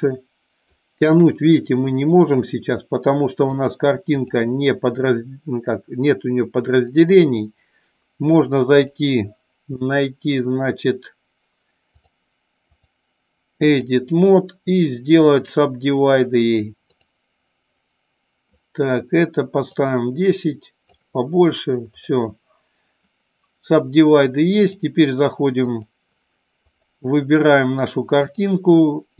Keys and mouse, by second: 0.1 click, 1.1 click, 1.8 click, 3.7-4.5 drag, 7.0 click, 8.9-12.4 drag, 12.7-14.0 drag, 17.7 right click, 19.7 click, 21.9 click, 24.7-25.9 drag, 26.7 click, 28.2-29.1 drag.